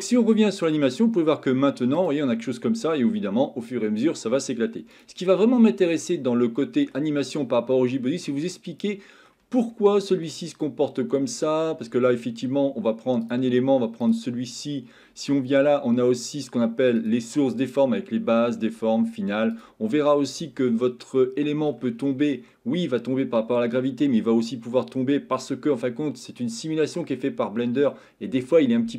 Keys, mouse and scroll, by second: 0.0 middle click, 2.0 click, 5.0 click, 6.1-7.0 shift+middle drag, 7.3-9.3 middle drag, 9.7-10.3 shift+middle drag, 10.7-11.9 middle drag, 13.2 click, 17.0-19.3 drag, 19.5 click, 21.1-21.7 middle drag, 25.7-26.4 middle drag.